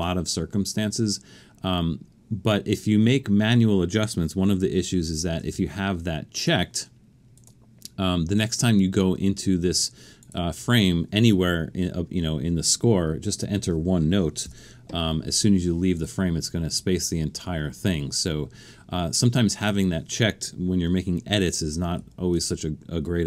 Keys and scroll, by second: 5.4 super+,, 14.5 typing, 22.0 super+z.